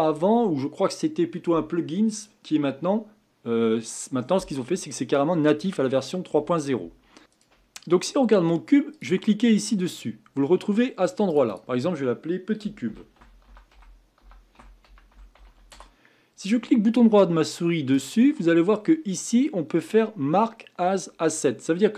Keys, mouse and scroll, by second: 7.2 click, 8.9 click, 11.3 click, 11.5-14.6 drag, 17.9-21.1 right drag.